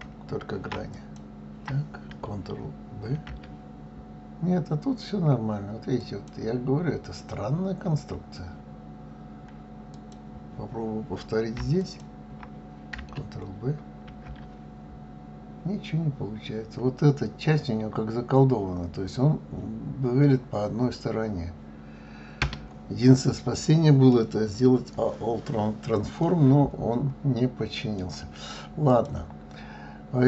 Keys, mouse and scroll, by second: 0.9 alt+click, 3.1 ctrl+b, 9.9 click, 11.8 alt+click, 14.1 ctrl+b, 23.2-24.3 middle drag, 24.3-25.4 scroll down 5, 26.2-28.9 middle drag, 28.9 click.